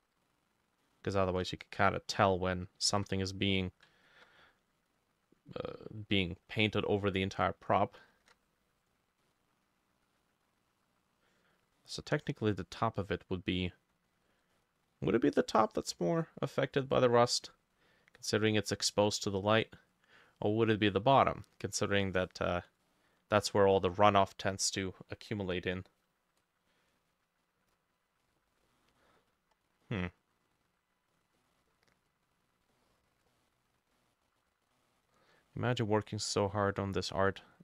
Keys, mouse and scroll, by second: 1.6 shift+click, 2.9 ctrl+z, 4.1 ctrl+click, 6.7 middle click, 8.2 ctrl+z, 9.3 middle click, 11.8 middle click, 14.6 middle click, 16.2 middle click, 18.2 middle click, 20.9 middle click, 22.2 middle click, 22.9 middle click, 23.8 middle click, 28.6 scroll down 1, 28.7 middle click, 29.3 scroll up 1, 29.9 middle click, 31.2 scroll down 1, 31.4 middle click, 32.1-32.8 scroll up 1, 32.8 middle click, 33.3 middle click, 34.0 middle click, 35.4 middle click, 36.2 middle click, 37.1 middle click.